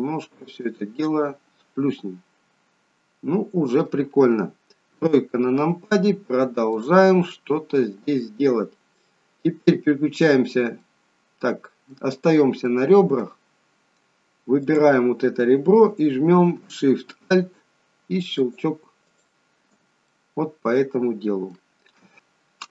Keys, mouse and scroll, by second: 1.0 middle click, 4.8 KP_3, 6.7 click, 7.5-9.6 scroll up 2, 10.7 middle click, 12.0 click, 12.5 middle click, 14.6 click, 18.3 alt+shift+click, 20.0 middle click.